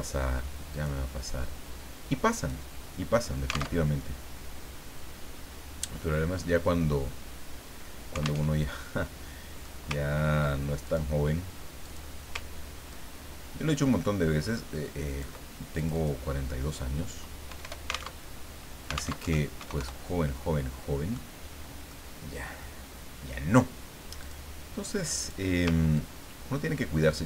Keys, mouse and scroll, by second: 0.7 click, 2.4 click, 3.8 alt+Tab, 8.4 alt+Tab, 9.1 click, 10.0 ctrl+scroll up 2, 10.8 ctrl+click, 11.8 click, 12.9-15.6 ctrl+drag, 15.7 ctrl+click, 17.5 BackSpace, 18.1 alt+Tab, 19.2 alt+Tab, 19.3 alt+KP_2, 19.6 alt+KP_0, 21.1 click, 21.9 scroll up 1, 22.1-24.2 scroll down 1, 24.2 click, 25.1 click, 25.9-27.2 ctrl+drag.